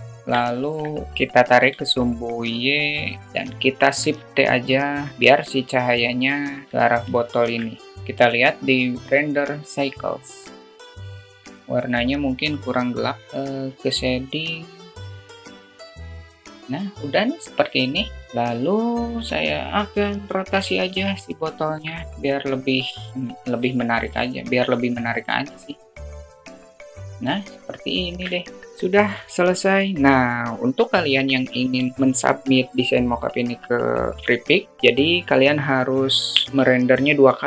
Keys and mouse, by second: 0.4 alt+middle click, 1.5 g, 2.9-3.3 alt+middle drag, 4.0 shift+t, 5.2-6.2 drag, 6.4 click, 6.7-7.4 alt+middle drag, 8.0 KP_0, 8.4 click, 9.0 click, 19.5-20.2 drag, 21.2 ctrl+click, 22.8 click, 23.6-23.9 alt+shift+middle drag, 25.8 KP_0, 26.6 drag, 27.4 alt+shift+middle click.